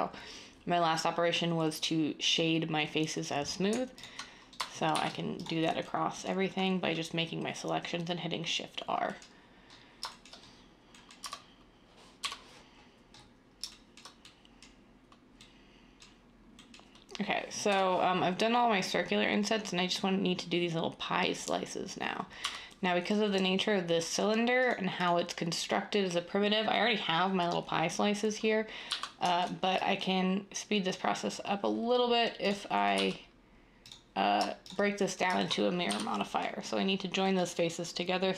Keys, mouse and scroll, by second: 4.9 r, 11.2 Tab, 12.2 7, 17.7 7, 22.4 Tab, 28.8 z, 32.9 z, 35.8 j.